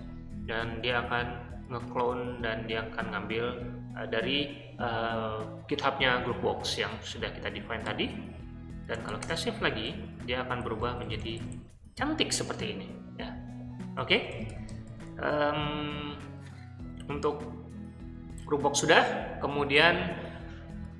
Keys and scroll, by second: 7.8-9.5 typing, 10.5-11.4 typing, 13.9-15.5 typing, 16.5-17.8 typing.